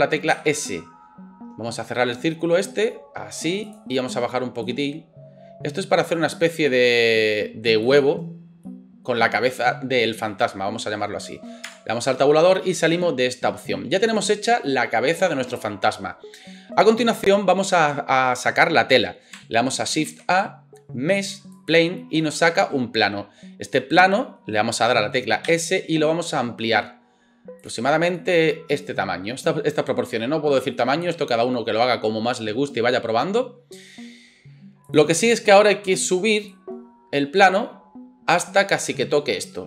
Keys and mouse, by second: 0.3 s, 3.8 middle click, 4.7-8.0 drag, 6.3 s, 8.0-34.9 middle drag, 11.7 Tab, 20.1 shift+a, 25.4 s, 34.9-39.6 drag.